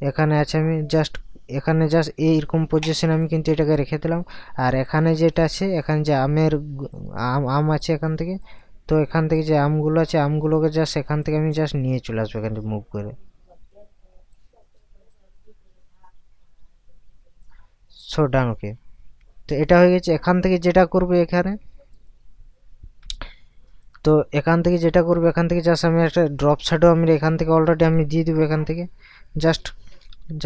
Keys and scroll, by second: 28.5 Caps_Lock, 30.1 ].